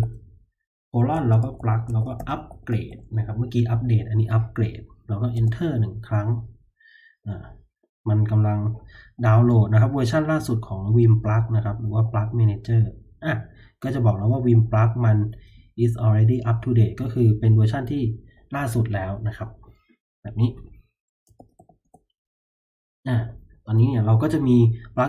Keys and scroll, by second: 0.9-3.3 typing, 5.3 Return, 21.1-22.0 typing.